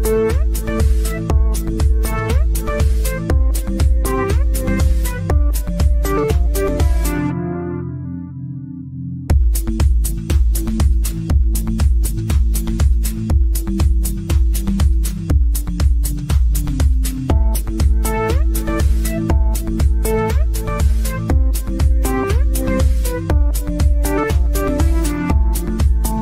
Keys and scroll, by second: 6.6 ctrl+z, 15.2 ctrl+z.